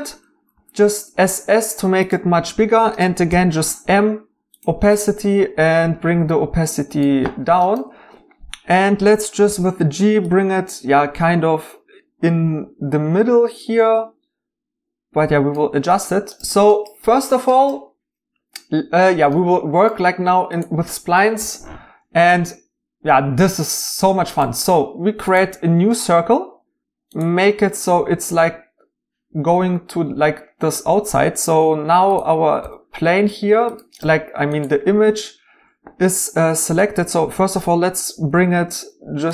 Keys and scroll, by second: 0.3 typing, 3.3 m, 4.9 typing, 9.4 g, 32.6 g, 34.2 Escape, 38.3 g.